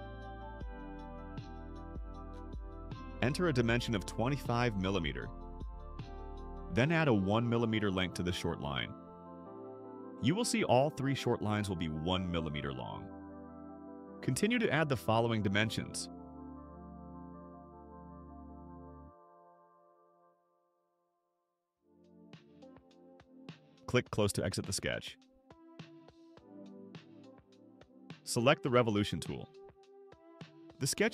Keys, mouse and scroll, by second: 1.2 click, 2.7 click, 3.7 2, 4.4 5, 5.0 Return, 8.0 click, 9.9 click, 10.8 1, 11.3 Return, 13.3 click, 14.1 click, 14.9 5, 16.2 Return, 17.4 middle click, 17.4 scroll up 2, 18.4 click, 19.0 click, 19.8 3, 20.5 Return, 22.3-22.8 scroll down 4, 26.1 click, 30.3 click.